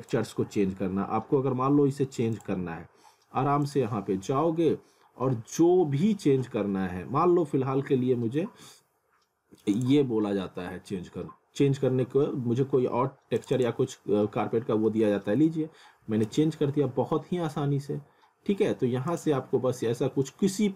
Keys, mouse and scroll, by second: 2.3 click, 5.3 scroll down 1, 8.0 scroll up 1, 9.7 click, 13.4 click, 14.9 middle click, 16.3 ctrl+z, 19.1 click.